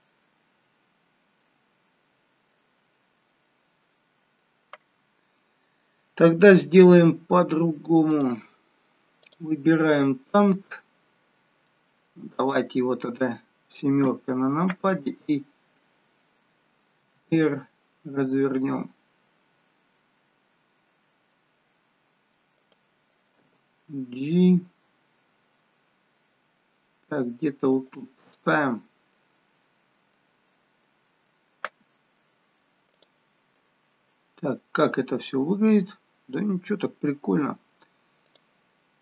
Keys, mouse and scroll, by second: 2.8-3.5 scroll down 2, 3.5 middle click, 3.5-4.9 scroll down 1, 4.9-5.9 scroll down 1, 8.4 click, 9.2 click, 11.4 scroll down 2, 11.7 middle click, 14.1 KP_7, 17.1 r, 23.4 g, 28.3 middle click, 29.7-30.8 scroll up 6, 30.2 middle click, 33.1 click, 33.5 scroll down 1, 33.6 middle click, 38.4 click.